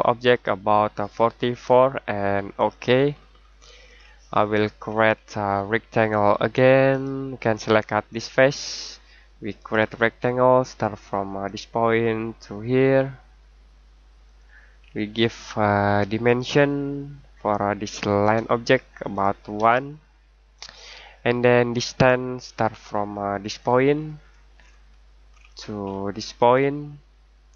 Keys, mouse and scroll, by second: 2.5 click, 3.1-3.5 scroll down 1, 3.5-4.4 scroll up 1, 4.4-6.7 scroll down 1, 6.9 click, 14.2 click, 14.8-16.2 scroll down 1, 16.2 click, 19.5 typing, 20.5 click, 21.2-21.7 scroll down 1, 23.4 click, 23.9 scroll down 1, 24.1-25.0 scroll up 1, 25.0 scroll down 1, 25.2-25.8 scroll up 1, 25.8-26.7 scroll down 1.